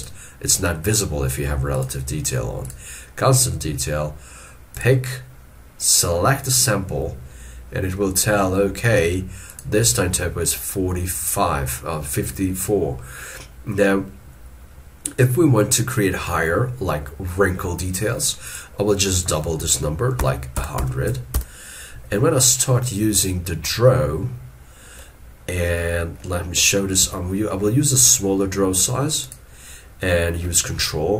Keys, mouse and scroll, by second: 20.2 1, 27.1 f.